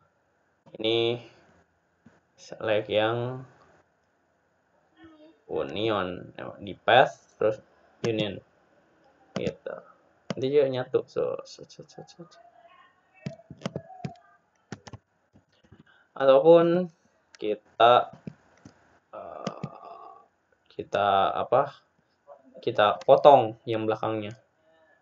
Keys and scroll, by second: 17.5 ctrl+z.